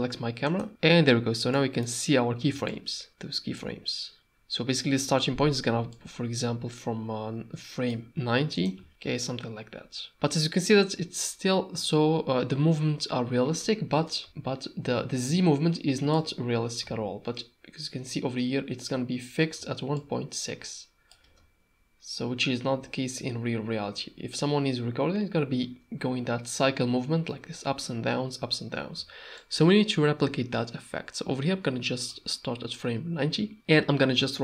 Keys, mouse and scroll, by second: 0.5 click, 1.7 middle click, 2.7-3.1 shift+drag, 3.1 space, 5.5 space, 5.9-7.9 shift+drag, 8.6-9.7 drag, 8.9 space, 13.9 space, 14.3-14.8 shift+drag, 14.8-15.9 shift+middle drag, 15.9 shift+click, 16.8 n, 19.9-21.1 shift+drag, 21.2 space, 25.6 space, 29.4-32.1 shift+drag.